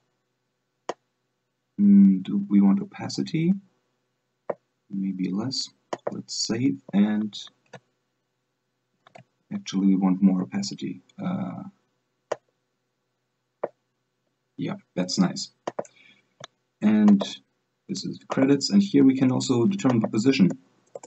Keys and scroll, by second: 7.9 alt+Tab, 9.3 alt+Tab.